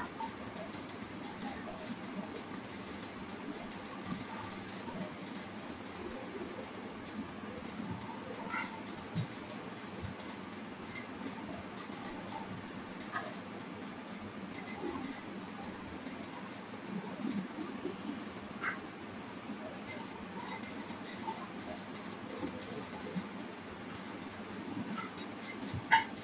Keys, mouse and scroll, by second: 3.9 scroll down 9, 5.3 scroll up 1, 6.6 click, 10.0 click, 16.3 click, 20.5 click.